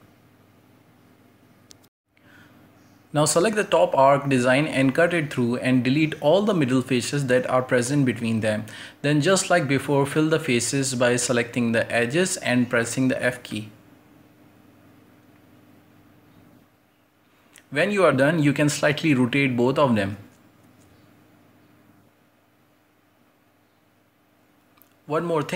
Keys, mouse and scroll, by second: 0.0 s, 0.6 Tab, 1.0 ctrl+space, 1.3 scroll down 1, 1.6-1.9 middle drag, 1.9-2.3 scroll down 2, 2.0 shift+middle click, 2.3-3.1 shift+middle drag, 3.1 scroll up 1, 3.6 right click, 3.6 Tab, 3.8 shift+middle drag, 4.0 scroll up 1, 4.2 right click, 4.6-6.3 typing, 5.1 ctrl+i, 5.6 scroll up 1, 5.6 middle click, 8.7 click, 9.1-10.3 alt+shift+right drag, 10.3 z, 10.5 shift+right click, 10.9 x, 11.0 middle click, 11.2 right click, 11.4 c, 11.6 x, 11.7 shift+middle click, 12.0-12.3 scroll up 2, 12.3 drag, 12.6 right click, 13.1 f, 13.2 right click, 13.3 f, 13.4 f, 13.6 shift+middle click, 13.8 scroll up 3, 14.1 right click, 14.4 shift+middle click, 14.6 scroll up 2, 14.8 middle drag, 15.0 shift+right click, 15.3 shift+right click, 15.4-16.6 typing, 15.6 right click, 15.9 ctrl+z, 16.0 right click, 16.5 shift+right click, 16.8 middle drag, 16.9-18.2 scroll down 7, 17.0 middle click, 17.3 Tab, 17.6 shift+middle click, 17.7 z, 17.8 middle drag, 18.2 middle click, 18.4 Tab, 18.6 right click, 18.8 l, 21.0 scroll down 2, 21.2 alt+h, 21.4 scroll up 3, 21.5 right click, 21.6 l, 22.0 r, 22.4 right click, 22.5 l, 22.8 r, 23.2 scroll up 1, 23.4-23.9 scroll down 3, 23.5 shift+middle click, 23.9 shift+middle click, 24.6 scroll up 2, 24.8-25.5 shift+middle drag.